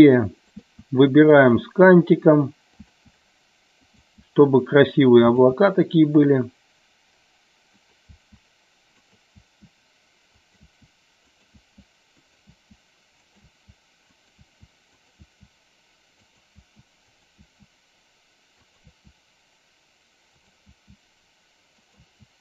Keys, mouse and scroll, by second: 0.5 click, 0.7 e, 1.4 click, 2.8 click, 2.8 e, 2.9 e, 3.9 click, 4.0 e, 5.3 click, 5.3 e, 7.8 click, 8.2 e, 9.0 click, 9.4 e, 10.4 click, 10.8-15.1 typing, 12.3 click, 14.2 click, 15.0 click, 16.3 click, 16.6 e, 17.1 click, 17.4 e, 18.7 click, 18.9 e, 20.4 click, 20.8 e, 21.9 click, 22.0 e.